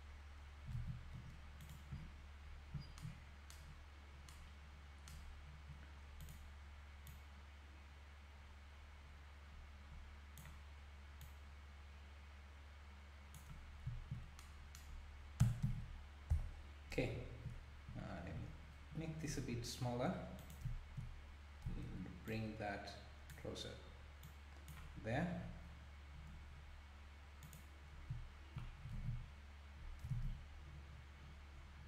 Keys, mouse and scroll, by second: 0.8 alt+a, 1.6 click, 1.9 scroll up 1, 2.7 scroll up 10, 3.9-4.3 scroll up 2, 5.2-5.8 scroll down 1, 6.2 click, 7.1 click, 11.2 click, 13.9 `, 15.4 Tab, 16.3 KP_Decimal, 18.4-18.9 scroll up 2, 19.3 s, 21.7 Tab, 22.3 click, 24.2 click, 25.1-25.7 scroll up 1, 27.4 scroll up 8, 27.5 click, 29.0 alt+a, 29.2-30.1 scroll down 2, 30.1 scroll down 3, 30.1 ctrl+s, 31.6-31.8 scroll down 2.